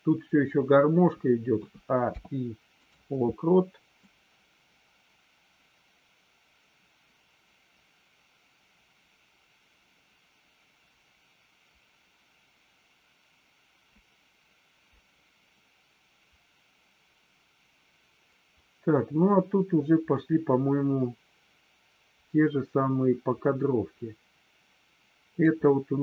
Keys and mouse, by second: 2.1 i, 4.2-25.4 drag.